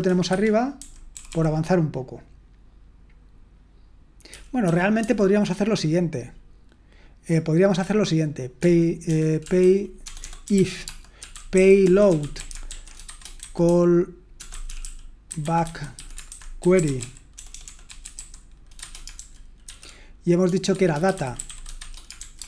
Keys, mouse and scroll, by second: 0.3 Escape, 0.8-1.2 typing, 11.0-22.4 typing.